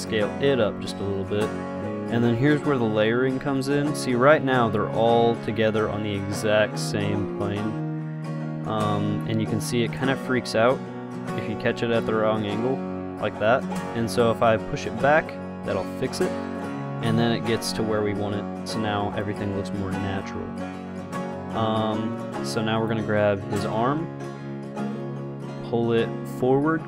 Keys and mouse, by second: 0.2 s, 1.5 click, 14.6-16.4 drag, 17.8 KP_0, 19.4-20.4 drag, 21.5 middle click, 21.9-24.0 drag, 25.2 click, 25.8 middle click.